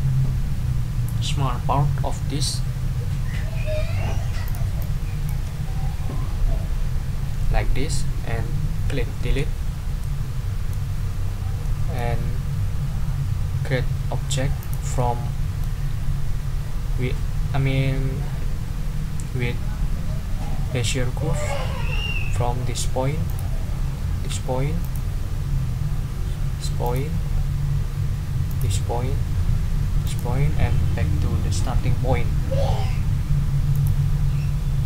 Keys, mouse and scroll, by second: 4.4 click, 4.8 click, 9.2 Delete, 10.0 middle click, 11.6 middle click, 14.6 click, 15.0 middle click, 23.3 click, 24.8 click, 26.8 click, 28.5 click, 30.0 click, 33.7 click.